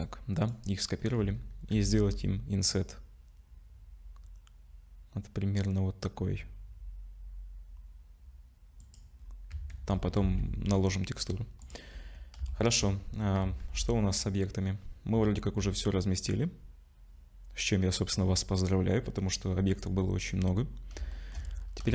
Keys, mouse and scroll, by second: 0.9-1.6 scroll up 2, 1.7 i, 9.2-10.1 scroll down 6, 9.5 Tab, 10.3 ctrl+s, 11.2-11.6 scroll down 2, 11.6 click, 11.9-12.3 scroll down 3, 12.5 shift+middle click, 13.2-13.6 scroll down 2, 13.4 z, 15.1 z, 21.1 shift+middle click, 21.6 scroll up 2.